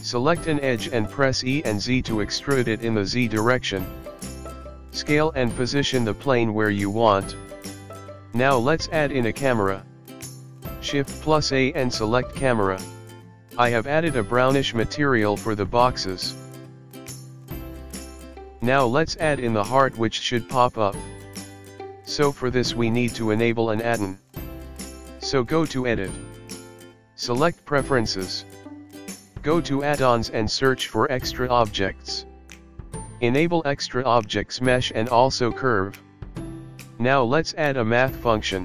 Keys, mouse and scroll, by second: 1.3 e, 5.0 g, 5.4 e, 7.0 Tab, 7.1 click, 7.5 g, 8.2 middle click, 8.6-9.0 scroll up 11, 8.9 middle click, 10.4 space, 10.7 space, 11.3 shift+middle click, 11.6 space, 12.5 space, 12.9 scroll down 2.